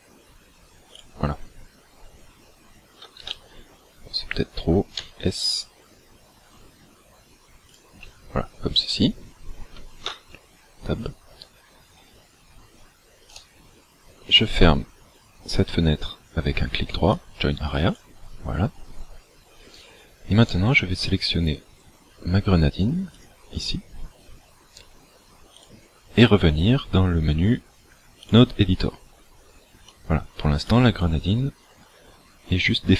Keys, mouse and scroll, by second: 1.1 click, 3.2 ctrl+z, 5.1 s, 7.7 click, 10.1 Tab, 13.3 right click, 19.8 right click, 20.5 right click, 21.8 scroll down 3, 23.1 click, 25.6 click.